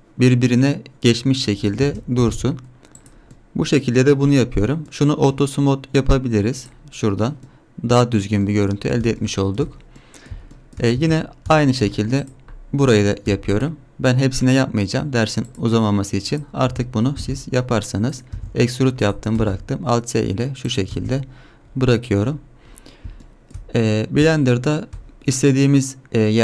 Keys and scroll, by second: 1.8 Tab, 2.2 g, 11.0 Tab, 17.2 alt+s, 18.4 e, 19.4 alt+s, 20.9 Tab.